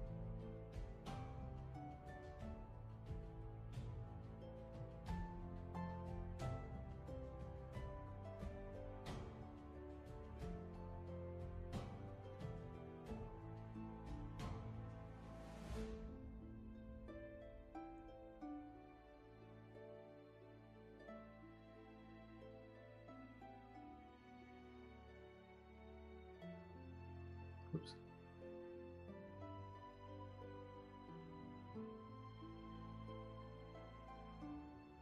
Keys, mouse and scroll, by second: 2.5 scroll down 1, 3.5 space, 9.7 scroll up 1, 10.7 ctrl+z, 13.5 ctrl+z, 18.1-19.7 scroll up 1, 23.6 shift+space, 27.7 ctrl+z.